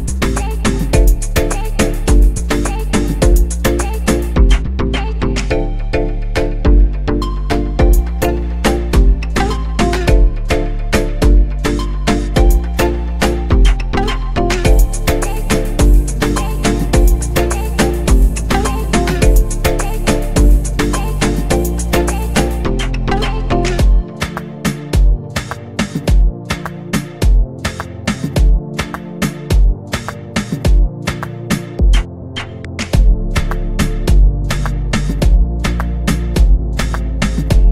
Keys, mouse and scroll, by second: 2.6 s, 4.9-5.6 scroll up 3, 5.6-8.5 scroll down 3, 9.4 shift+d, 14.8 shift+d, 20.2 shift+d, 25.9-27.3 scroll down 1, 27.3 click, 27.9 click, 29.6 drag, 32.3 Tab, 32.8 click, 33.3 Tab, 34.2-35.0 scroll up 1, 35.0 click, 37.2 click.